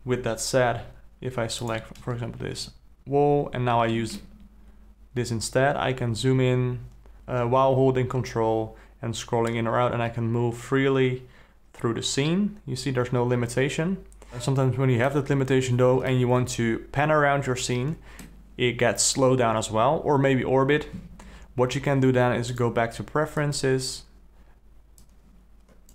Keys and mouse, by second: 1.7 click, 2.5 KP_Decimal, 4.3-15.1 ctrl+middle drag, 16.3-18.3 middle drag, 22.5-24.0 drag.